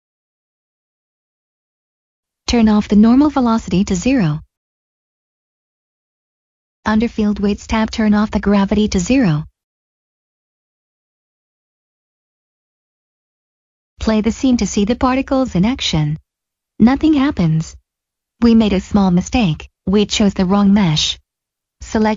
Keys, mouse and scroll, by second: 0.1 Return, 0.4 click, 3.8 click, 4.4 0, 6.5 click, 7.2 click, 7.5-8.5 scroll down 1, 8.5 click, 10.6 Return, 13.7 click, 18.5 click, 18.9 middle click.